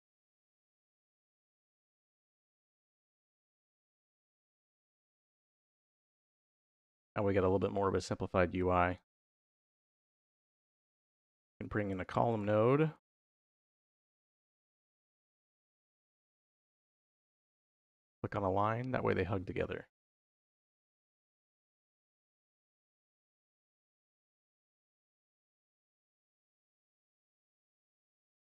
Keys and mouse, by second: 0.6-3.7 drag, 4.0 click, 4.7 middle click, 5.5 middle click, 6.0 click, 6.9 g, 7.6 middle click, 8.4 g, 9.0 middle click, 9.5 click, 10.0 click, 10.9 click, 11.4 shift+a, 15.8-16.8 drag, 17.9 click, 20.1 middle click, 21.1 middle click, 23.1 click, 24.4 shift+d, 24.8 y, 25.6 click, 26.5-27.2 drag, 27.6-28.4 drag.